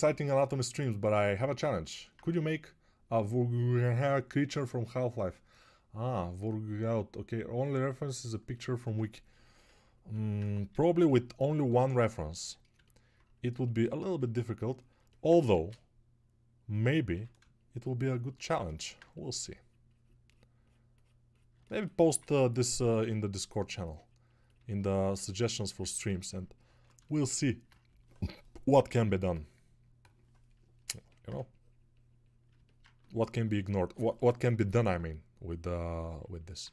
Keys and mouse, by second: 17.2 ctrl+r, 22.3 ctrl+1.